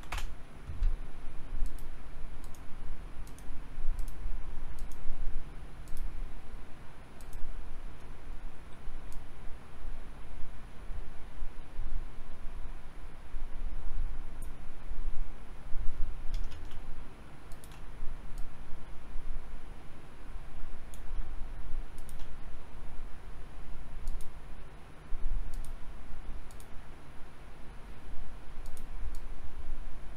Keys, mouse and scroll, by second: 0.1 KP_Decimal, 1.7-14.7 drag, 13.8 Delete, 16.7-17.4 typing, 18.4-21.0 drag, 21.2-21.9 typing, 24.1 click, 28.7-30.1 drag.